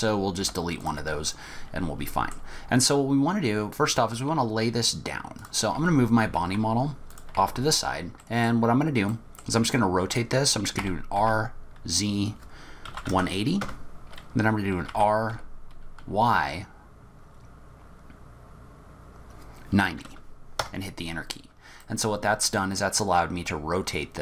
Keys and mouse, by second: 0.5 Delete, 1.4-2.4 middle drag, 5.5 click, 5.8 g, 7.4 r, 8.3 click, 9.1 click, 10.8 r, 14.9 r, 21.9 middle click.